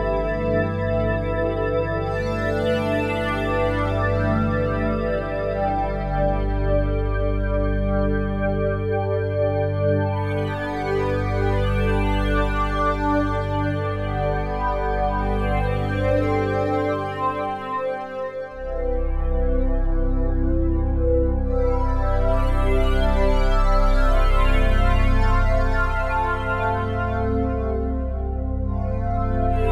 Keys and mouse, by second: 2.0 m, 3.0 Escape, 3.5 n, 5.7-6.1 typing, 13.6 shift+click, 14.8-18.1 drag, 22.1 click, 23.3 click, 24.7-26.5 drag, 27.5 click, 28.7-29.7 drag.